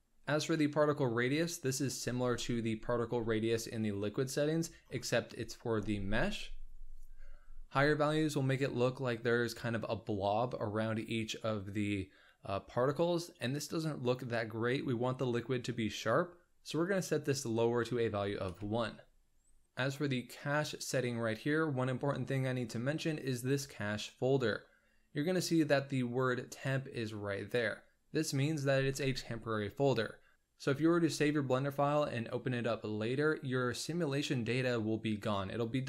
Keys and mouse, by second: 16.8-19.6 drag.